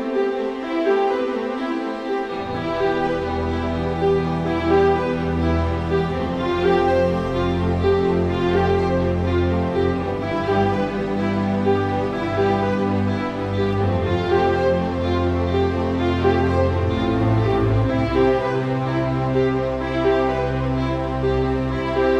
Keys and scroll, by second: 0.8 Down, 2.5 Down, 4.8 Down, 5.7 Up.